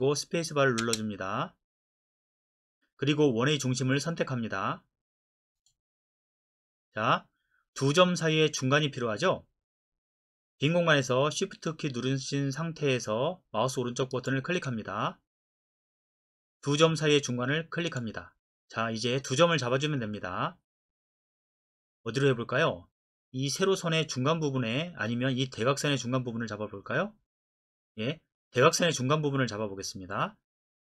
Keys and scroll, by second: 0.8 space.